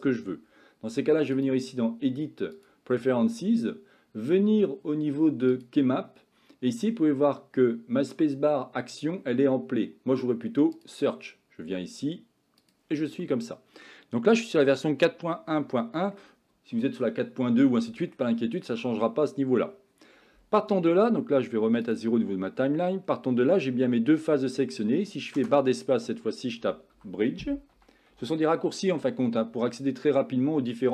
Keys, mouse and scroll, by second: 1.5-2.9 drag, 13.3 middle click, 15.8 shift+middle click, 17.8 middle click, 22.0 click, 23.2-24.7 middle drag.